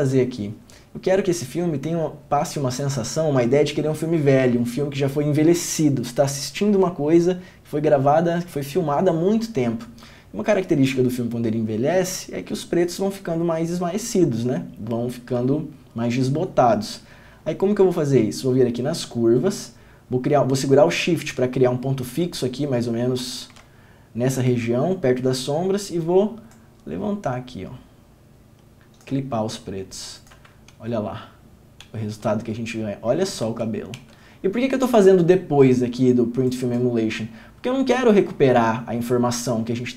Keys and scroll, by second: 30.9 ctrl+d, 33.7 ctrl+d, 34.2 ctrl+d.